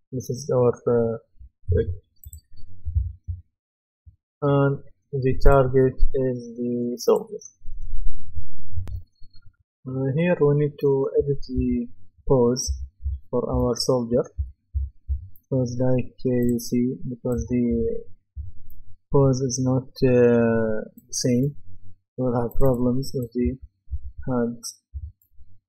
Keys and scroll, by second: 8.8 F10, 11.2-14.7 typing, 17.3-18.3 typing, 23.2-24.9 typing.